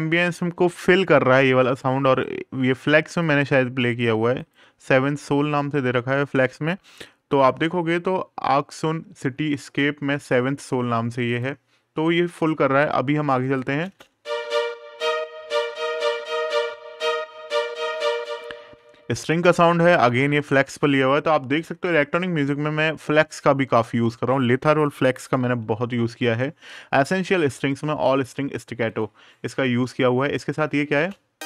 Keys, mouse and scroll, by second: 0.5-1.3 scroll down 1, 1.9 click, 7.1 super+KP_Add, 9.9 super+KP_Subtract, 11.0 click, 13.2 right click, 13.5 space, 17.6 space, 17.9 click, 23.2 click, 25.5 super+KP_Add, 28.0 super+KP_Subtract, 28.6 click, 30.0 right click, 30.7 space.